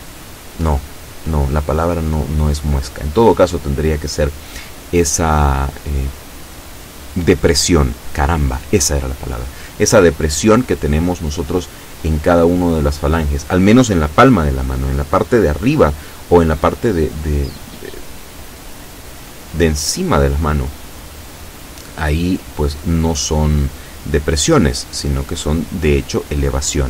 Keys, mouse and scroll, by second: 0.0 shift+middle click, 0.7 shift+KP_7, 3.6 right click, 4.1-5.4 middle drag, 6.4-6.8 shift+scroll up 1, 7.0-8.3 shift+middle drag, 8.7 shift+right click, 9.6 shift+right click, 10.3-11.4 shift+middle drag, 12.0 shift+right click, 13.0 KP_7, 13.9-15.1 middle drag, 15.6-16.7 drag, 16.9 scroll down 1, 17.9 click, 18.7-19.8 middle drag, 20.4 shift+right click, 21.1 shift+right click, 22.8 shift+right click, 23.3-24.7 shift+middle drag, 25.4 shift+right click, 25.9-26.8 shift+middle drag.